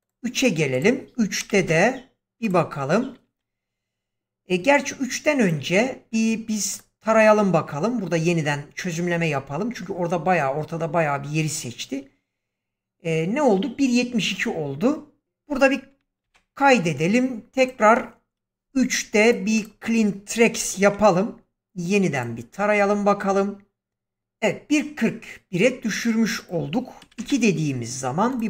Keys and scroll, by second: 1.3 3, 1.5 Return, 16.1 ctrl+s, 20.5 x, 27.0 2, 27.1 Return.